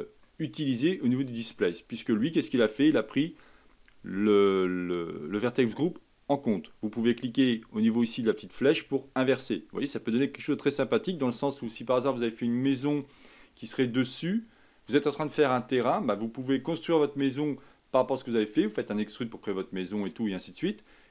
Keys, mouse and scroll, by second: 0.2-3.3 middle drag, 8.6 click, 9.5-11.4 middle drag, 11.4-14.2 scroll up 1.